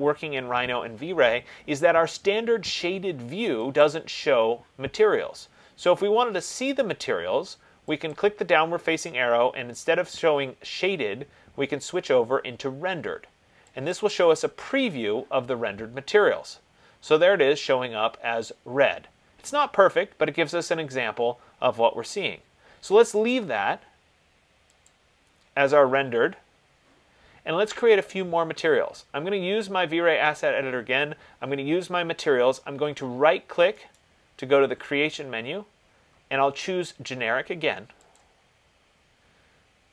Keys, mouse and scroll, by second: 4.1 click, 8.4 click, 14.2 click, 25.1 click, 28.0 click, 34.2 right click, 38.4 click.